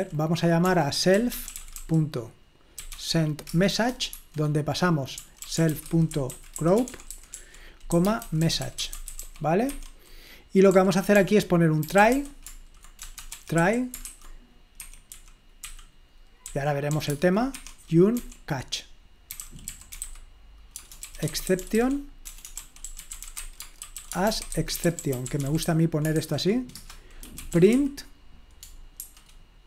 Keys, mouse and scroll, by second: 0.0-9.7 typing, 3.5 Return, 9.7 Escape, 10.7-18.1 typing, 14.9 Escape, 19.2-28.0 typing, 26.8 Return.